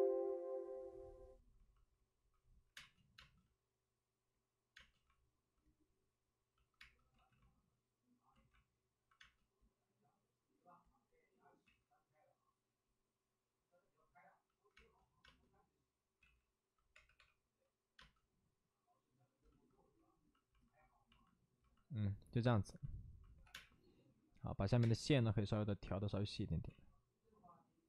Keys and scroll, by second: 2.6 5, 3.1 space, 4.7 space, 6.8 space, 7.0 ctrl+z, 8.3 ctrl+z, 9.1 space, 11.5 space, 11.6 ctrl+z, 14.7 space, 15.1 space, 16.1 ctrl+z, 16.8 3, 17.9 space, 17.9 3, 22.9 space, 23.4 3, 23.4 space, 24.6 ctrl+z, 24.7 space.